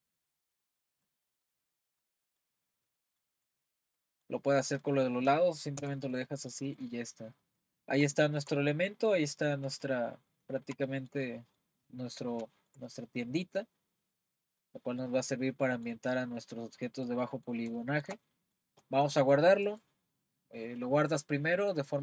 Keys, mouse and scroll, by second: 0.2-1.6 middle drag, 1.6-2.1 scroll down 1, 2.1-3.4 middle drag, 3.4-4.0 scroll down 2, 4.0-5.8 middle drag, 5.8 Tab, 6.3-6.7 middle drag, 6.7-7.0 drag, 7.0 scroll up 2, 7.4-22.0 middle drag.